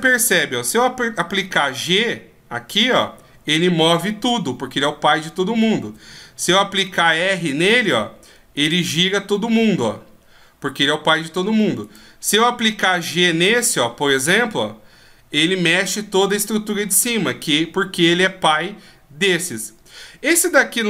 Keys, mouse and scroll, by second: 0.6 g, 5.8 r, 11.8 right click, 12.5 g.